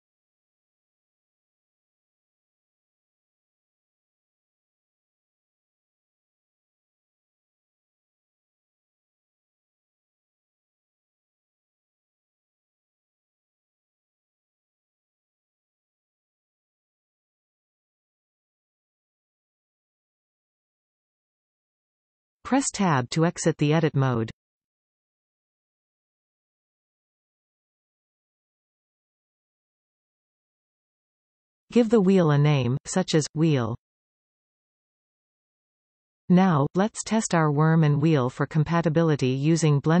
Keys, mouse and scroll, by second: 0.1 shift+click, 0.6 shift+click, 1.5 shift+click, 2.4 shift+click, 3.4 middle click, 3.4 f, 3.8-4.3 scroll up 2, 4.4-10.1 shift+middle drag, 5.6 alt+a, 6.7 b, 8.4 f, 9.5 alt+a, 10.1 alt+shift+click, 10.7 scroll down 1, 11.8 e, 12.9 Return, 13.6-15.2 middle drag, 14.8 e, 15.2 Return, 16.1 alt+m, 18.9-20.2 scroll down 1, 20.2 alt+a, 20.4 scroll down 1, 20.7 middle click, 23.1 shift+middle click, 24.3 Tab, 25.3-25.7 scroll up 1, 26.8 middle click, 28.4 click, 29.4-39.7 ctrl+drag, 32.3 BackSpace, 34.4 Return, 39.7-40.0 middle drag.